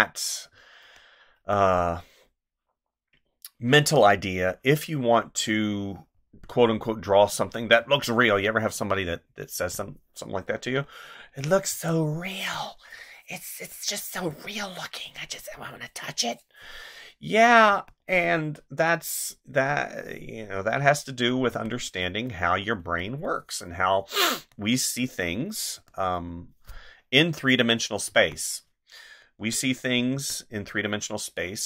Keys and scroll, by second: 0.5 space, 7.8 space, 11.7 space, 14.3 space, 17.7 space, 21.5 space, 22.8 space, 25.8 space, 28.1 space, 30.1 space.